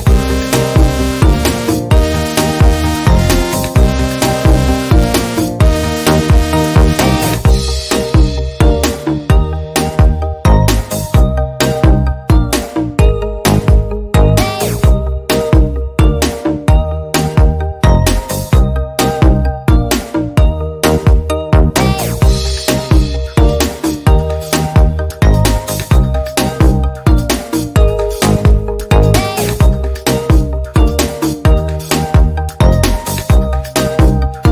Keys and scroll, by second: 2.3 Right, 2.8 Right, 2.8 Left, 4.3 ctrl+c, 4.9 ctrl+v, 12.9 Left, 13.3 Down, 14.1 Down, 14.1 Up, 14.9 Up, 14.9 Down, 16.1 ctrl+v, 27.3 Left, 27.8 Left, 28.2 Right, 33.0 Down, 33.5 Down, 34.0 Up.